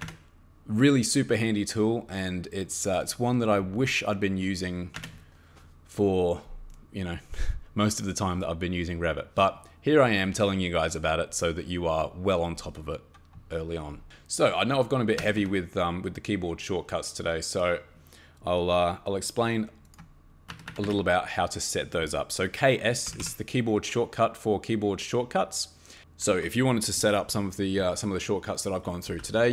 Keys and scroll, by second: 0.0 Escape, 4.9 Escape, 15.2 Escape, 15.4 Escape, 20.5 Escape, 20.7 Escape, 20.8 Escape, 22.8-23.6 typing, 28.8-29.5 typing.